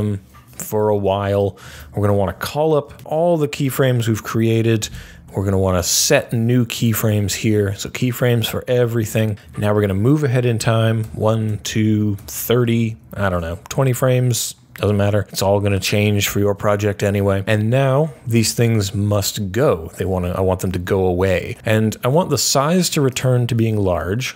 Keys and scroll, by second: 1.6 super+a, 3.0 u, 3.4 u, 10.9 Page_Down, 12.1 Page_Down, 12.8 Page_Up, 24.2 super+c.